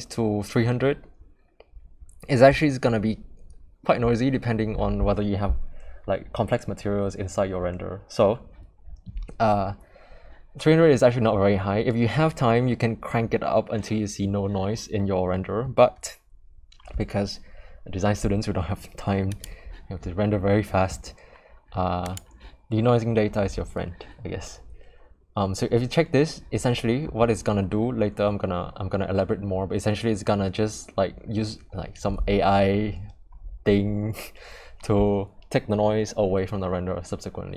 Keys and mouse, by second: 19.3 click, 22.0 click.